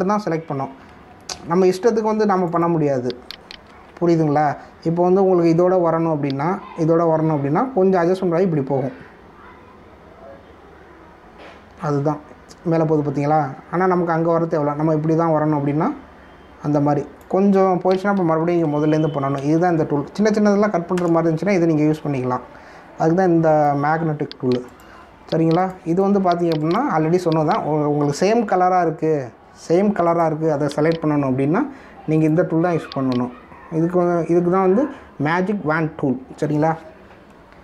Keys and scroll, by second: 1.5 ctrl+alt+z, 4.6 ctrl+d, 19.6 ctrl+alt+z, 20.3 ctrl+z, 21.9 ctrl+Return, 23.0 ctrl+d.